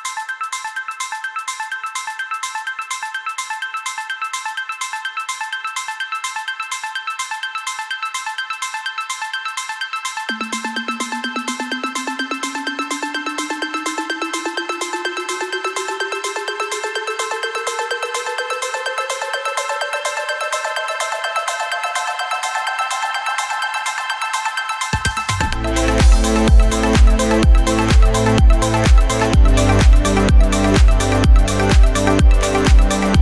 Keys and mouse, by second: 0.0-0.9 typing, 2.3-4.2 drag, 3.1 KP_1, 3.8 KP_3, 3.8 r, 4.2 ctrl+middle click, 4.8-33.2 drag.